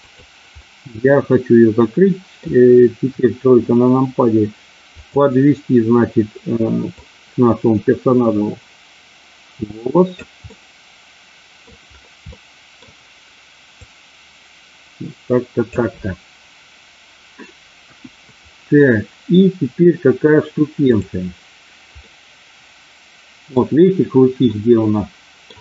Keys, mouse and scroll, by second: 0.0 click, 0.6-2.4 middle drag, 3.1 KP_3, 7.0-10.1 drag, 10.5-11.6 middle drag, 12.3 middle click, 13.8-15.6 drag, 17.8 KP_1, 20.9 click, 22.0-23.5 middle drag, 24.5-25.5 middle drag.